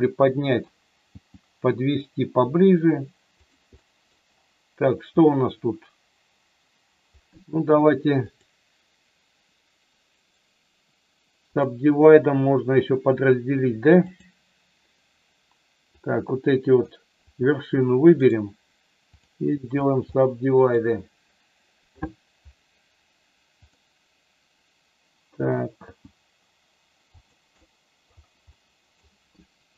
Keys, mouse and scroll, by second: 0.5 middle click, 1.1 g, 3.3 click, 3.8 middle click, 10.3 right click, 14.1 click, 16.0 click, 17.2 click, 18.1 right click, 20.1 middle click, 23.6 click, 25.8 g, 27.1 click, 27.6 middle click, 28.5 middle click.